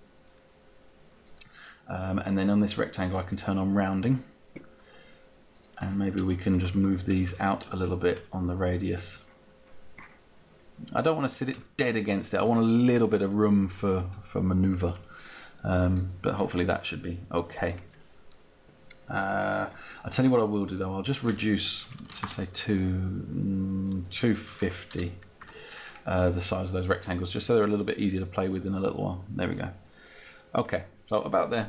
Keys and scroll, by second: 13.8 Down, 17.5 Down, 21.4 2, 22.0 0, 22.2 Return, 24.1-25.5 typing.